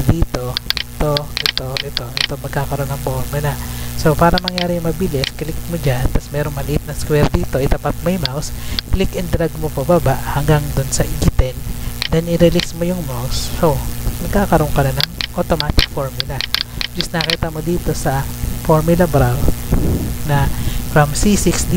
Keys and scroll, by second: 20.3 Up.